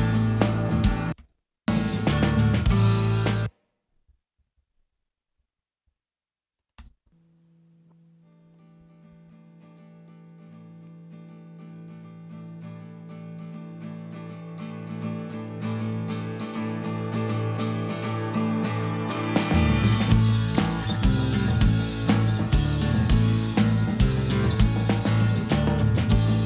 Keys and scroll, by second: 0.8 space, 3.2 space, 4.0 super+space, 4.3 super+=, 6.7 space, 9.0 super+=.